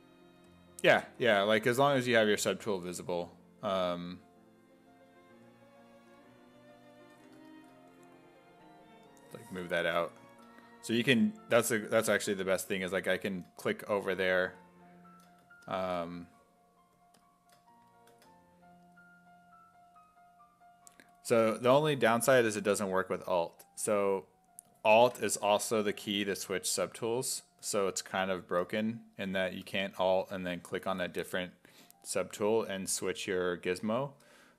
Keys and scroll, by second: 7.2 w, 8.0 w.